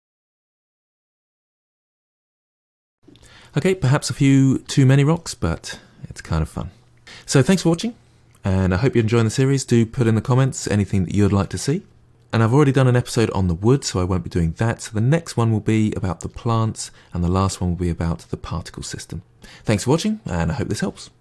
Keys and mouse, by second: 0.0-2.2 typing, 0.0 middle click, 0.2 click, 0.3 middle click, 1.1 middle click, 1.4 middle click, 1.6 click, 2.0 shift+Tab, 2.4 ctrl+middle click, 2.8 click, 4.5 middle click, 5.0-7.1 middle drag.